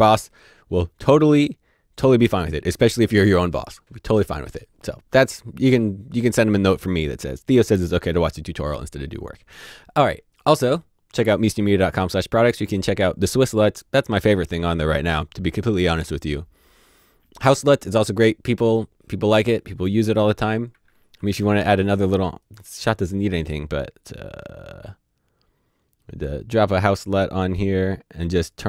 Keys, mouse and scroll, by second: 20.8-21.7 typing, 22.4 right click.